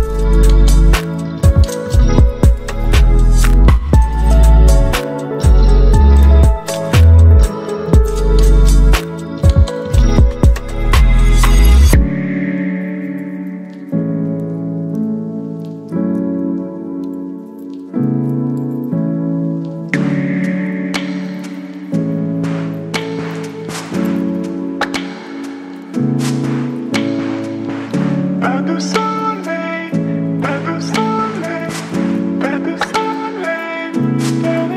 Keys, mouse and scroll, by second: 18.0 ctrl+0.